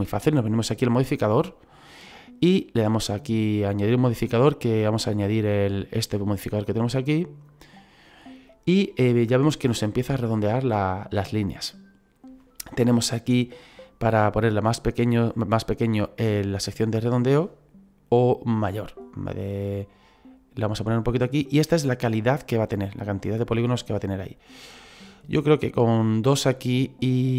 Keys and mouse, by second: 1.6 click, 3.2 click, 7.1 click, 14.6 click, 18.7 click, 23.3 click.